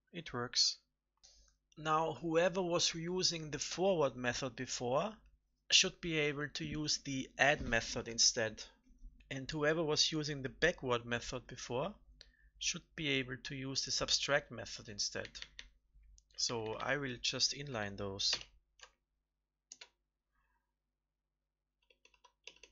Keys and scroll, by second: 18.2 ctrl+alt+n.